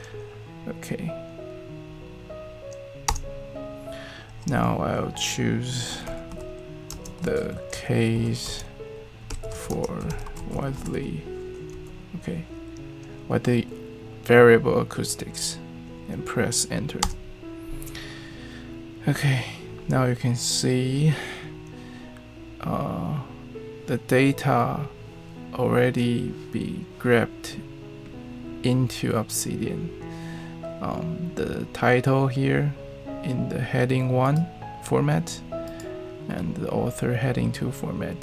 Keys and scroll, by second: 2.8-3.5 typing, 5.6-12.2 typing, 16.8-17.5 typing.